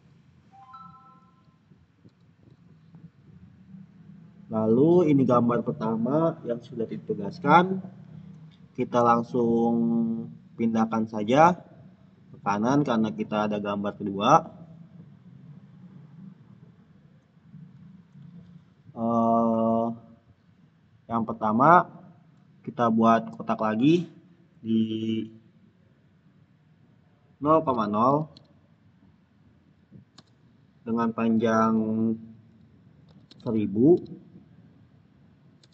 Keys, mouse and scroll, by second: 1.5 click, 3.3-3.9 scroll down 1, 8.7 scroll down 1, 8.9-19.4 drag, 21.5 click, 27.6 click, 27.7-28.7 typing, 30.0 Return, 32.9-34.3 typing, 35.5 Tab.